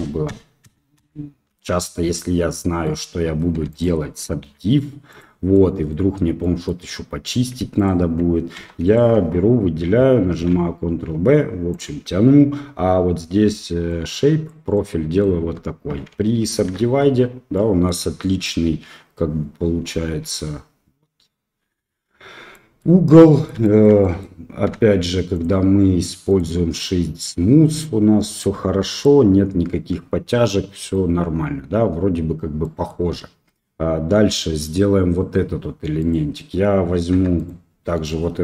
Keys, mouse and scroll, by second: 2.1 click, 2.4 middle click, 3.5 3, 4.4 x, 5.5 middle click, 6.4 middle click, 7.7 alt+click, 8.5 2, 8.8 alt+click, 10.3 ctrl+b, 13.9 click, 14.7 middle click, 15.3 Tab, 16.6 ctrl+3, 17.5 drag, 17.5-17.9 middle drag, 18.6 KP_3, 22.5 middle drag, 23.1 middle click, 23.6 shift+middle drag, 24.0 middle click, 26.3 click, 26.8 middle click, 27.5-28.4 middle drag, 29.0-30.8 middle drag, 30.8 click, 32.6 middle click, 33.0 Tab, 35.9 click, 37.1 3, 37.3 click.